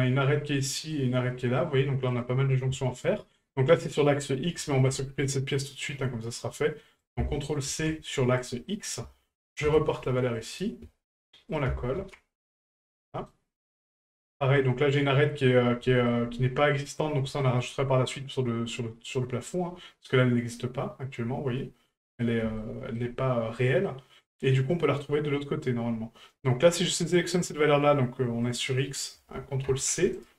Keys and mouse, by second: 0.6 middle drag, 1.6 middle click, 2.1 right click, 3.7 middle click, 4.7 shift+middle click, 7.0-8.5 ctrl+drag, 8.7 middle drag, 11.5 ctrl+click, 12.9-13.3 middle drag, 14.1 right click, 15.1 middle drag, 15.9 shift+middle drag, 17.4 shift+middle click, 22.6-23.0 shift+middle drag, 23.9-24.3 middle drag, 28.5-30.3 drag.